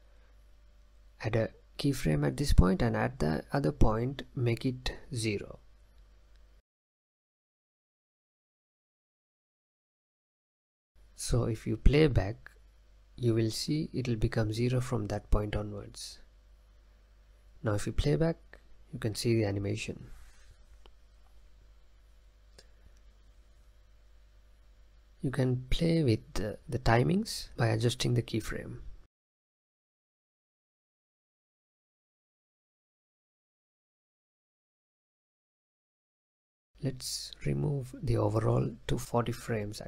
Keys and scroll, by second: 9.6 0, 10.0 Tab, 14.5 space, 16.3 space, 16.9 space, 17.6 space, 22.9 space, 25.1 space, 31.1 space, 33.6 space, 38.6 0, 38.9 Tab.